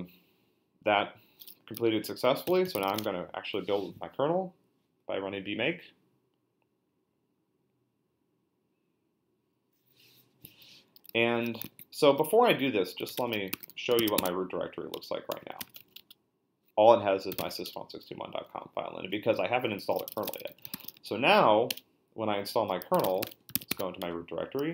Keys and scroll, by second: 2.2-3.3 typing, 12.8-18.0 typing, 14.9 Return, 19.6-21.5 typing, 21.7 Return, 22.7-24.7 typing.